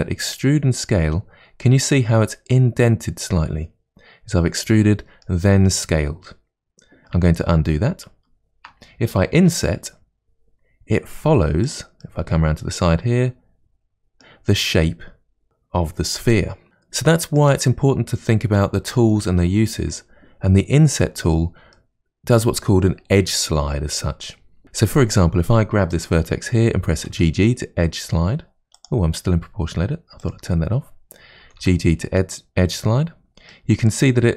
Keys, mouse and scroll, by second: 8.1 ctrl+z, 9.4 i, 12.0-15.0 middle drag, 16.3-19.7 middle drag, 21.7-24.6 middle drag, 27.0 g, 30.2 click, 31.4 g, 33.5-34.3 middle drag.